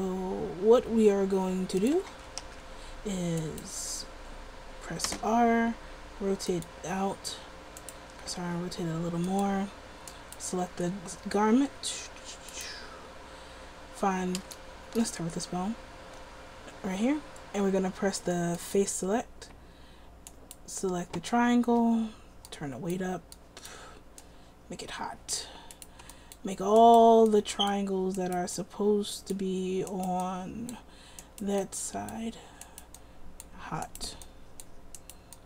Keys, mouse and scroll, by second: 2.0 a, 2.3 a, 2.6 alt+r, 3.6-5.2 right drag, 5.2 r, 8.3 r, 14.9-17.2 middle drag, 20.5-35.4 drag.